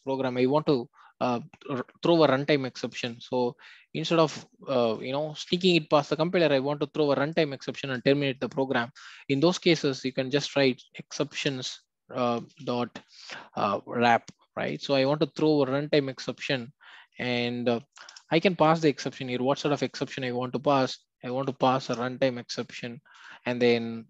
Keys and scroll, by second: 11.4 Return, 18.1 Return, 21.8 Return.